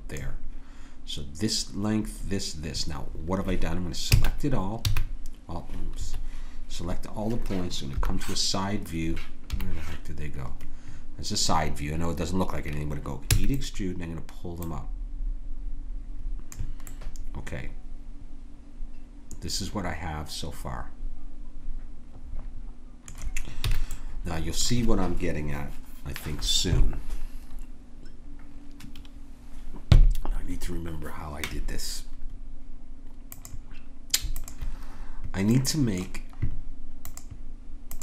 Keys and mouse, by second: 4.1 a, 4.9 a, 4.9 s, 7.9 KP_1, 9.5 KP_Decimal, 13.2 e, 14.6-16.5 drag, 16.9 click, 17.4-18.9 middle drag, 23.6 a, 23.9-26.7 middle drag, 33.3-37.0 drag, 37.0 middle click, 37.3 click.